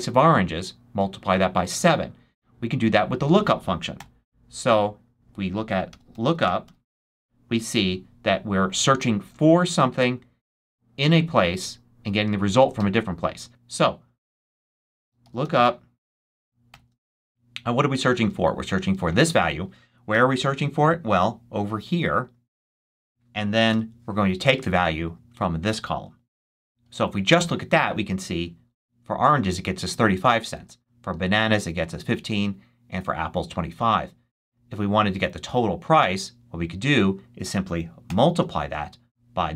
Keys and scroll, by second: 3.9 =, 5.6-7.3 typing, 14.4-16.6 typing, 20.0 ,, 23.6 ,, 26.3 shift+0, 27.3 shift+Return, 30.5 super+c, 31.0 super+v, 38.0 shift+8.